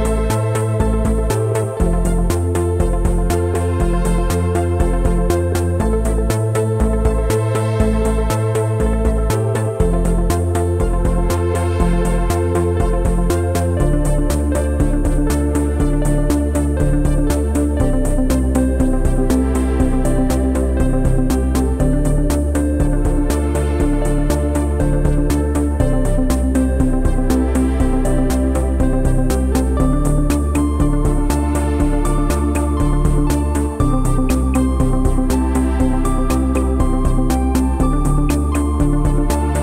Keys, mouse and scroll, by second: 0.3-0.8 scroll up 4, 0.8 click, 2.1 Tab, 2.3 a, 3.0 Tab, 3.4 shift+click, 3.8-4.1 scroll down 5, 4.1 Tab, 4.4 a, 5.5 g, 6.4 Tab, 6.7 o, 11.4 Tab, 11.7-12.1 scroll up 2, 12.1 Tab, 12.3 click, 12.5 Tab, 13.4 scroll up 2, 13.6 Tab, 13.8 click, 14.1 g, 14.4 Tab, 14.6 a, 15.2 middle click, 16.0 g, 16.8 Tab, 16.8-17.1 scroll down 6, 17.1 b, 17.6 o, 27.5-27.8 scroll up 3, 27.8-28.3 shift+middle drag, 28.3-28.8 scroll up 3, 28.8 click, 28.9 Tab, 29.6 Tab, 29.8 click, 30.3 Tab, 31.2 click, 31.9 l, 32.4 g, 33.3 g, 34.9 alt+middle click, 35.4 g, 36.1 s, 36.6 r, 38.7 click, 39.0 b.